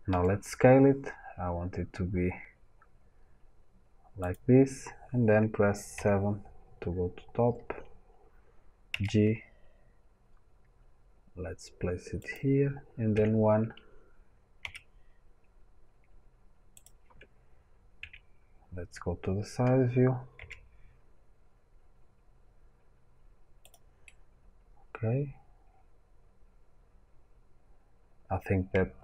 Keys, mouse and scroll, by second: 0.0 s, 8.8 right click, 8.8 g, 14.5 g, 20.3 g, 23.6 click, 24.0-29.0 middle drag.